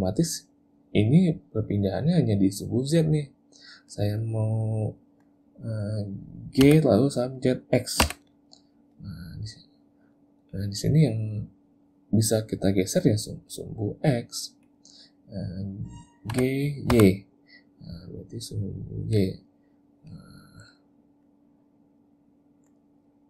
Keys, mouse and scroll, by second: 4.5 middle click, 6.7 g, 16.4 g, 20.2 click, 21.3 middle click.